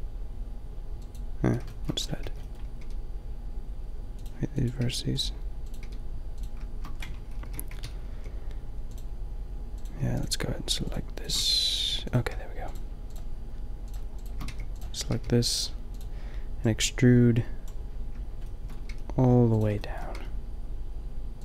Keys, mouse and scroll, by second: 1.6 middle click, 2.3 b, 2.7 g, 4.8 g, 5.8 g, 7.5 ctrl+l, 8.1 g, 11.4 g, 14.4 g, 15.1 g, 17.6 g, 18.8 g, 20.1 g.